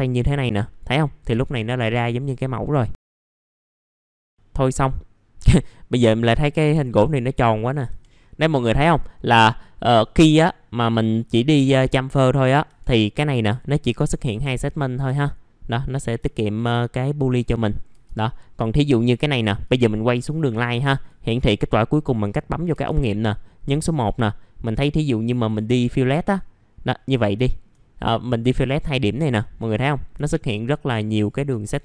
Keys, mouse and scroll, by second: 1.8 middle click, 2.9 click, 3.3 scroll down 1, 3.4 middle click, 3.6-6.7 scroll up 1, 6.8 alt+middle click, 7.4-7.8 scroll up 1, 7.8 F4, 8.3 scroll up 1, 8.5 F4, 9.2 middle click, 12.6 F4, 12.7-13.7 scroll up 1, 14.0-14.4 scroll down 1, 14.4 F4, 14.7 middle click, 14.8 scroll down 1, 15.1 alt+middle click, 16.2 alt+middle click, 17.5-17.9 scroll up 1, 19.6 click, 22.7 1, 23.4 middle click, 24.6 click, 25.0-25.6 scroll up 1, 25.6 F4, 26.0 click, 27.4 alt+middle click, 29.3 alt+middle click, 30.2 alt+middle click.